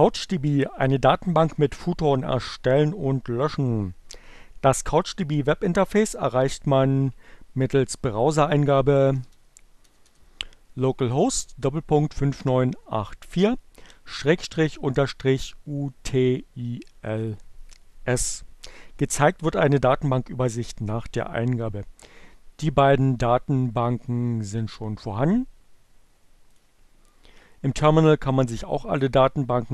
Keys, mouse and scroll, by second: 7.8 click, 8.1-9.0 typing, 10.3 BackSpace, 14.9 Return, 26.2 click.